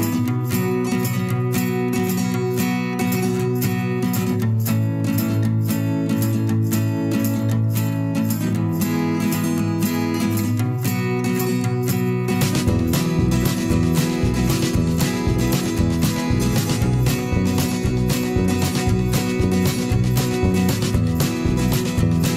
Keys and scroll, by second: 0.4 Delete, 2.3 z, 4.7 v.